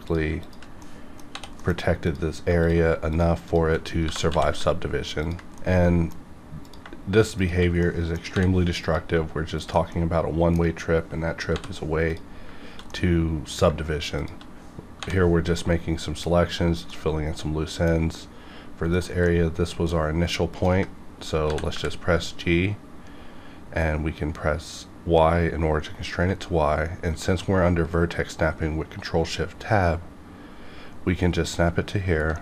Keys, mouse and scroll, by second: 0.1 click, 0.8 middle click, 1.3 j, 1.6 middle click, 2.0 click, 4.0 g, 4.3 z, 5.2 ctrl+click, 5.5 middle click, 6.6 click, 7.4 shift+click, 7.8 middle click, 8.3 j, 8.8 click, 8.9 click, 9.6 shift+click, 9.9-11.3 middle drag, 11.3 scroll down 1, 11.5 j, 12.1 click, 13.0 middle click, 14.2 shift+click, 15.0 j, 15.6-19.0 middle drag, 18.9 click, 19.2 middle click, 20.5 ctrl+click, 21.1 scroll up 1, 21.4 g, 21.7 y, 26.2 g, 31.4 ctrl+click, 32.3 middle click.